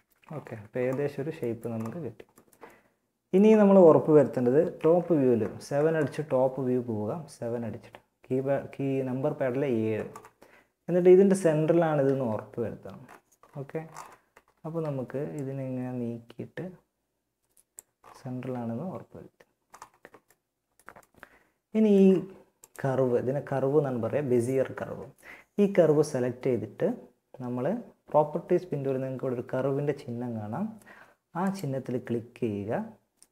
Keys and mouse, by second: 4.0 KP_7, 11.2 z, 17.4 z, 19.6 middle click, 20.6 middle click, 21.8-23.4 drag, 23.4 right click, 23.6 middle click, 30.6-32.4 drag.